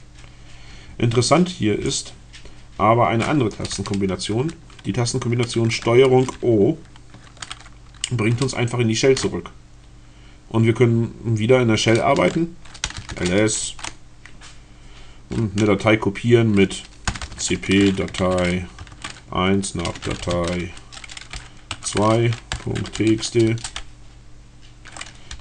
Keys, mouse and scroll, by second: 6.4 ctrl+o, 12.6-13.5 typing, 16.7-23.6 typing, 25.1-25.4 typing.